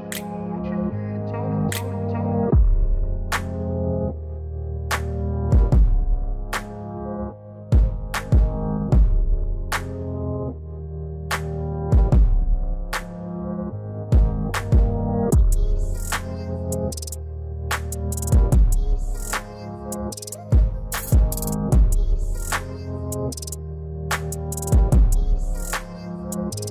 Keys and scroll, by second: 1.9 alt+w.